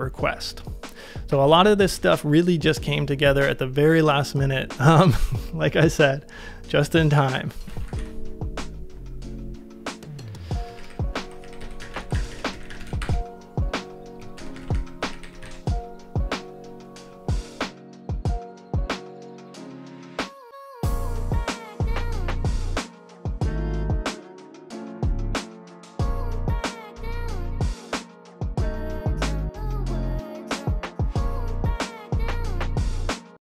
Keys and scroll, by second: 2.9 super+Tab, 7.6 typing, 10.5-15.9 typing.